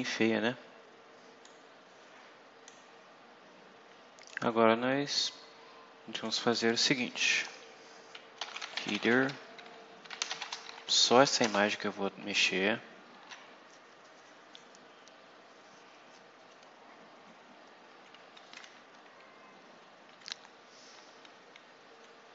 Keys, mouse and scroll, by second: 1.4-2.8 drag, 4.2 click, 4.7 scroll down 2, 5.1 scroll up 2, 6.0 click, 7.1 Return, 8.1-11.1 typing, 11.4 Return.